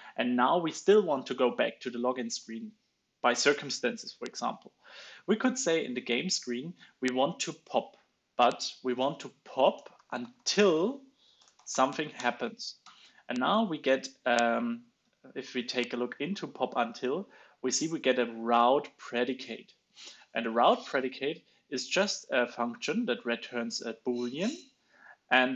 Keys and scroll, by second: 12.7 alt+Right, 15.0 alt+Down, 15.0 alt+Left, 15.6 alt+Left, 16.2 super+b, 19.6 super+b.